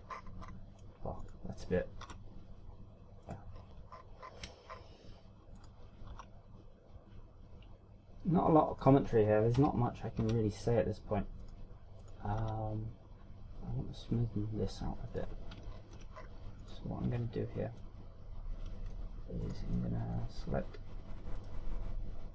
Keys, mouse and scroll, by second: 0.2 KP_1, 0.8 scroll down 1, 1.1 shift+scroll up 4, 1.3 shift+scroll down 1, 2.2 right click, 3.0 r, 4.3 right click, 4.5 scroll down 3, 4.9-5.6 shift+scroll up 6, 6.0 scroll up 1, 6.6 right click, 7.2 r, 9.8 right click, 10.5 KP_3, 11.2 r, 12.4 right click, 13.0 right click, 13.4 r, 16.1 click, 16.8 ctrl+scroll down 4, 17.1 scroll up 3, 17.6 right click, 18.0 Tab, 18.7 middle click, 20.4 right click, 20.7 middle click.